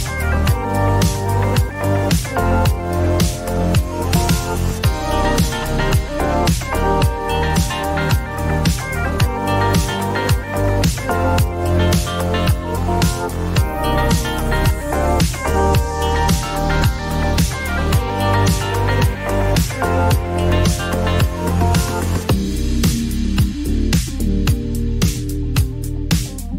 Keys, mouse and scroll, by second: 0.4 click, 1.5 click, 2.0-3.8 typing, 3.7 click, 6.3 click, 6.4-7.1 typing, 9.8 click, 11.5 click, 14.8-15.7 typing, 15.3-17.4 drag, 16.8 Return, 17.4 typing, 17.9-21.5 drag, 21.0 -, 22.1 8, 23.1 Return, 25.4 click.